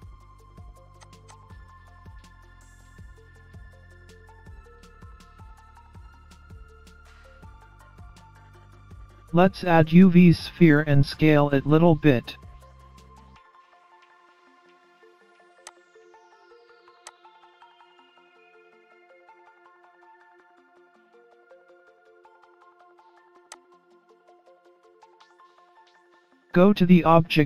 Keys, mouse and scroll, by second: 0.4 click, 0.8 click, 1.4 scroll up 2, 1.5 middle click, 2.6 click, 2.9 click, 3.4 middle click, 4.0-4.5 scroll down 3, 4.6 click, 4.8 click, 5.4 middle click, 6.8-7.3 scroll down 3, 7.8 ctrl+z, 8.2 ctrl+z, 8.4 ctrl+z, 8.8 ctrl+z, 9.0 ctrl+z, 9.3 ctrl+z, 9.6 ctrl+z, 9.6-10.0 scroll down 3, 9.8-10.2 scroll up 4, 10.2 middle click, 12.2 Tab, 12.6-13.2 scroll down 3, 13.3-14.8 scroll up 2, 13.7 middle click, 17.4 shift+a, 20.7 click, 22.5 middle click, 24.6 s.